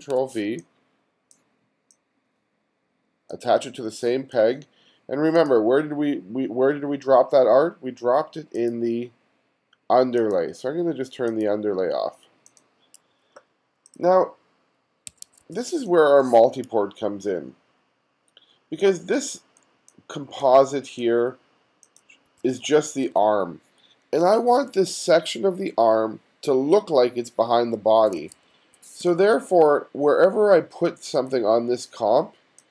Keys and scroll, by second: 0.0 super+v, 3.9 space, 15.2 1, 15.8 space, 22.3 2, 28.2 1, 29.0 space.